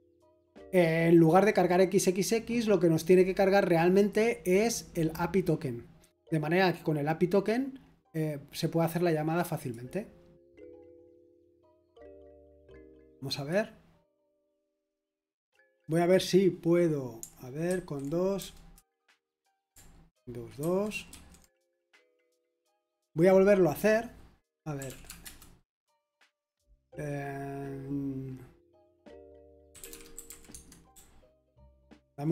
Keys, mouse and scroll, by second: 10.6 click, 17.6 super+2, 18.7 super+Return, 21.1 super+2, 24.6-25.3 typing, 29.6-32.3 typing.